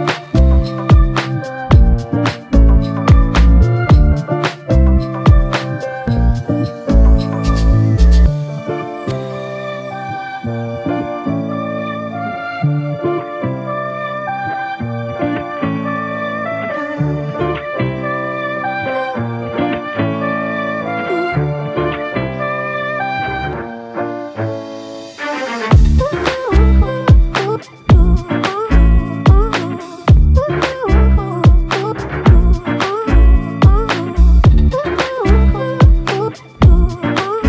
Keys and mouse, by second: 3.6 alt+click, 9.4 double click, 11.0 alt+click, 12.2 g, 13.2 f, 14.2 alt+click, 15.8 double click, 16.1 alt+click, 16.7 alt+click, 18.6 double click, 20.4 alt+click, 23.9 alt+click, 25.7 alt+shift+click, 26.4 ctrl+alt+click, 28.8 f, 29.8 alt+click, 31.7 double click, 32.3 alt+click, 33.9 ctrl+alt+click, 34.6 alt+shift+click, 35.4 alt+click, 36.9 shift+click.